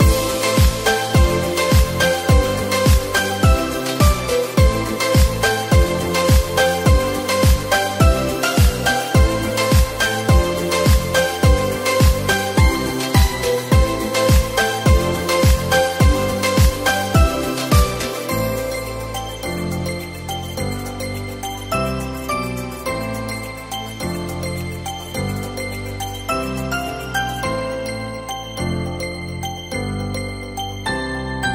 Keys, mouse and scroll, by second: 3.7 shift+a, 5.6-6.5 scroll down 4, 6.5-8.5 scroll up 4, 8.5 click, 9.2 s, 13.3-13.7 scroll down 2, 14.0 scroll down 2, 14.1 s, 16.1 Tab, 17.8 click, 18.8 shift+click, 20.3 e, 23.2 click, 24.3 shift+click, 25.2 ctrl+b, 27.4 Tab, 27.8 right click, 28.7-30.6 middle drag, 30.6 KP_0.